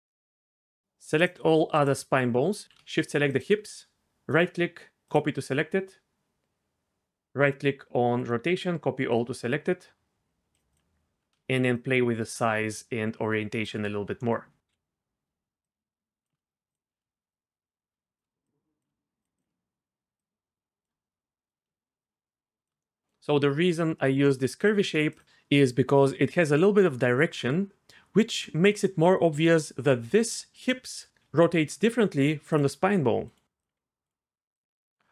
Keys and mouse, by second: 1.7 shift+click, 2.6 ctrl+z, 4.3 click, 8.2-9.2 drag, 11.7-13.7 shift+drag, 14.7 KP_3, 15.7 shift+click, 16.7 click, 17.3 shift+click, 18.4 shift+click, 19.4 click, 20.2 shift+click, 22.0 shift+click, 24.6-25.2 shift+drag, 28.3 r, 31.2 r, 32.7 r, 33.2 click, 33.7 r, 34.0 click, 34.9 middle click.